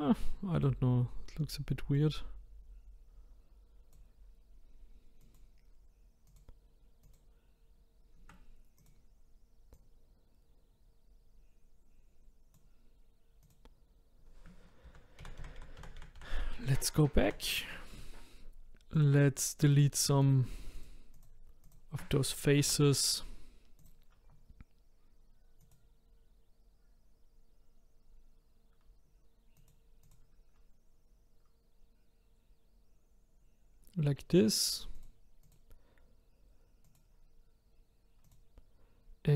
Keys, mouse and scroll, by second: 0.3-1.9 shift+middle drag, 1.9-5.1 drag, 5.2 click, 6.2-8.9 drag, 9.7 click, 13.4 click, 14.9 ctrl+z, 15.2 ctrl+z, 15.4 ctrl+z, 15.6 ctrl+z, 15.8 ctrl+z, 16.0 ctrl+z, 16.2 ctrl+z, 17.2 ctrl+z, 18.9 click, 19.7 click, 20.2 shift+click, 20.7 shift+click, 21.1 shift+click, 21.6 shift+click, 22.7 Delete, 25.6 click, 29.6 click, 30.0 click, 34.9 click, 35.4 click, 36.9 click, 38.2 click.